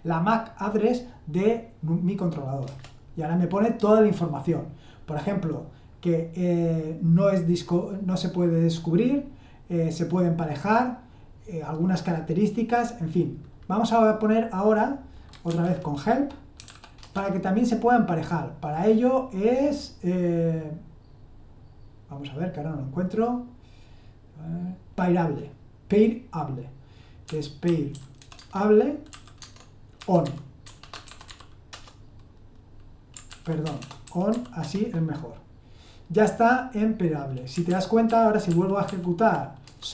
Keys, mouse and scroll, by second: 2.6 Return, 15.1-17.2 typing, 27.0-30.6 typing, 29.6 Caps_Lock, 33.1-34.3 typing, 37.7 ctrl+p, 38.1 ctrl+p, 38.5 ctrl+p, 38.9 ctrl+p, 39.6 Return.